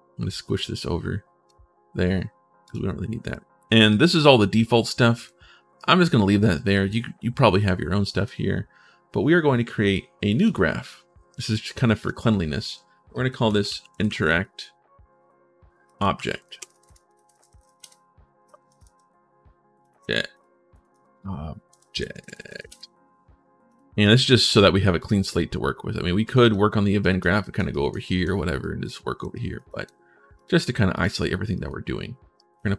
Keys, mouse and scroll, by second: 2.4 click, 3.1 right click, 3.7 right click, 4.6 right click, 5.5 right click, 6.3 right click, 7.8 right click, 10.1 click, 11.8 click, 13.3-14.6 typing, 16.1 e, 17.2 e, 19.6 click, 20.1 click, 20.5 click, 22.3 e, 23.4 click, 23.8 right click, 24.8 click, 25.0 click, 26.0 click, 26.8 right click, 27.2 right click, 27.5 right click, 27.8 right click, 28.4 right click, 29.1 right click, 29.4 right click, 30.1 right click, 30.7 right click, 31.3 right click, 32.1 right click.